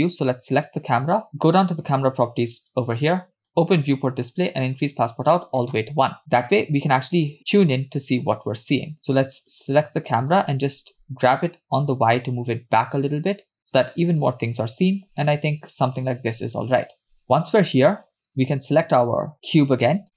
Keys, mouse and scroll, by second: 0.6 click, 3.5 click, 3.8-4.5 scroll down 2, 4.6 click, 6.4 click, 9.5 click, 10.8 g, 18.3 click, 20.0 scroll down 1.